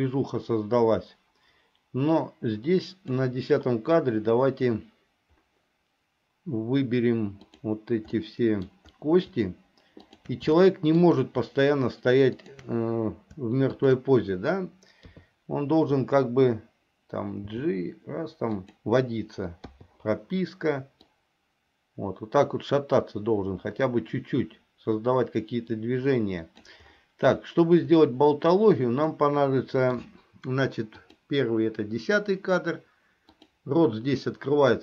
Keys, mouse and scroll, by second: 8.3 middle click, 10.2 shift+click, 10.7 shift+middle click, 15.2 KP_3, 17.6 g, 19.8 i, 21.2-26.8 drag, 29.2 middle click, 31.1 click, 33.5 click.